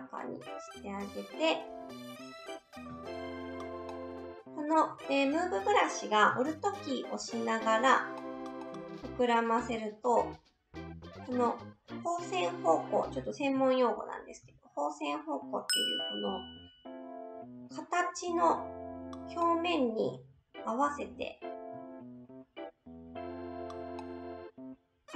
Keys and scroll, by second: 2.8 s, 13.5 ctrl+alt+z, 14.4 s.